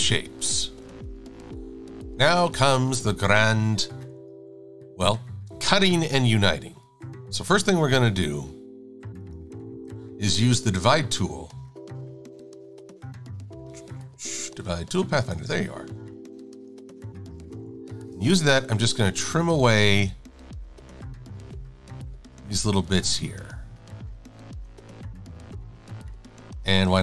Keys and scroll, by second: 1.0 shift+super+a, 2.2 v, 4.0 super+=, 17.5 shift+super+a, 18.8 Delete, 20.1 Delete, 20.6 Delete, 21.9 Delete, 23.2 Delete, 23.4 Delete, 24.5 Delete, 24.7 Delete.